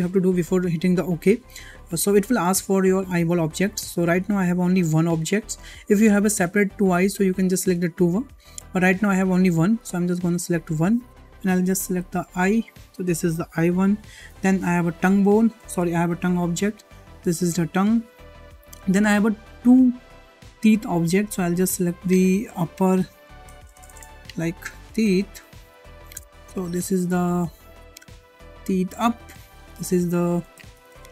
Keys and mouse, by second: 7.6 click, 8.5 click, 10.5-13.0 drag, 14.4-17.6 drag, 20.6 click, 21.3-29.0 drag, 23.7 BackSpace, 23.9 BackSpace, 25.3 e, 29.6-31.1 drag, 30.8 e.